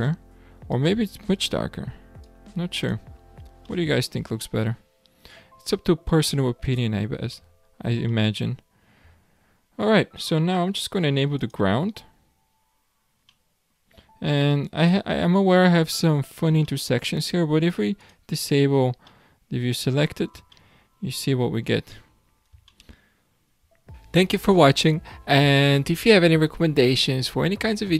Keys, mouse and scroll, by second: 3.8-6.5 middle drag, 6.5-7.4 scroll down 8, 7.4-11.1 shift+middle drag, 11.5 click, 13.4-15.0 middle drag, 15.0 scroll down 1, 15.2-15.9 shift+middle drag, 15.9-16.3 scroll up 4, 16.6-18.0 shift+middle drag, 18.0 click, 18.6 scroll down 3, 19.1-21.0 middle drag, 21.0 shift+scroll down 1, 21.4-22.4 scroll up 11, 22.7-23.8 shift+middle drag, 23.8-24.2 scroll down 7, 24.5-26.5 shift+middle drag, 26.5 scroll down 1, 26.7-27.8 shift+middle drag, 27.8 scroll down 1.